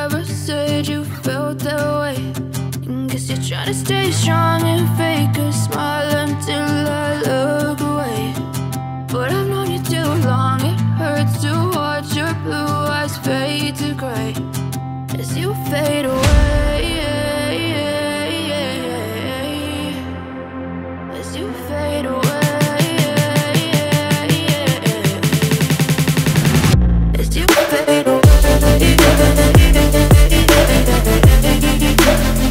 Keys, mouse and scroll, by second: 0.5 Tab, 3.3 click, 3.9 click, 6.8 Up, 9.2 click, 10.7 i, 11.1 click, 11.3 v, 12.7 click, 15.8 click, 21.5 v, 24.7 v, 24.7 click, 27.7 Tab, 30.5 Tab.